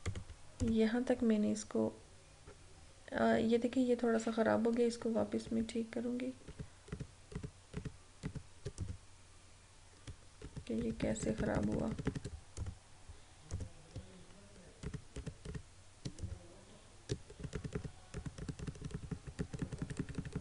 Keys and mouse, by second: 0.1 click, 5.0 click, 5.4 ctrl+z, 8.8 click, 10.4 ctrl+z, 12.7 click, 14.9 ctrl+z, 16.3 click, 17.5 ctrl+z.